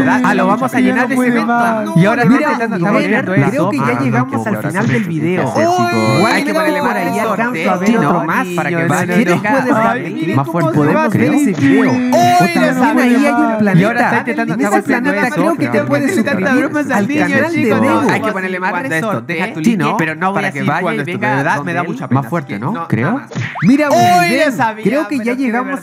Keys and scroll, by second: 18.4 space.